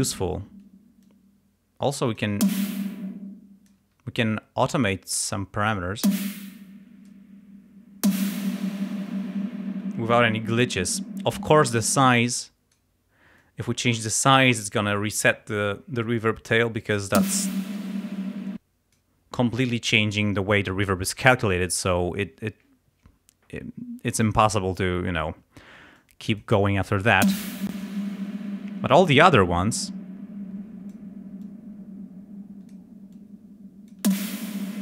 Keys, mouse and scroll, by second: 1.1-2.4 drag, 2.4 space, 2.8-3.9 drag, 3.8 space, 5.8-7.3 drag, 6.1 space, 8.5 space, 12.0 click, 13.4 click, 17.2 space, 18.5 click, 26.0 click, 27.2 space, 29.2-31.1 drag, 31.4-32.9 drag, 33.2 click, 34.1 space, 34.6-34.8 drag.